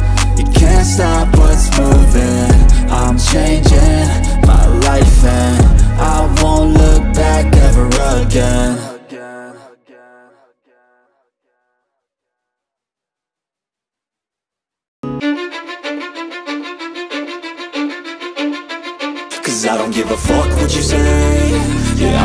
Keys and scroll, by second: 8.8 space, 11.7 BackSpace, 12.9 ctrl+c, 14.3 ctrl+c, 17.3 ctrl+v.